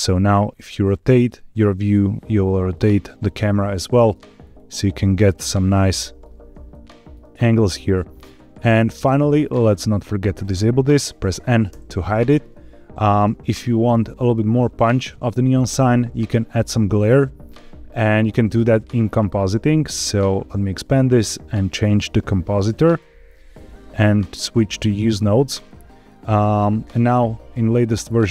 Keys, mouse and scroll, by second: 0.1 middle click, 4.1 scroll down 1, 4.3 scroll up 3, 5.2 shift+middle click, 6.6 shift+middle click, 10.0 click, 11.6 n, 12.5-13.1 shift+middle drag, 19.8 click, 20.1 click, 21.4-22.9 drag, 24.7 click, 25.6 middle click, 26.1 scroll down 1.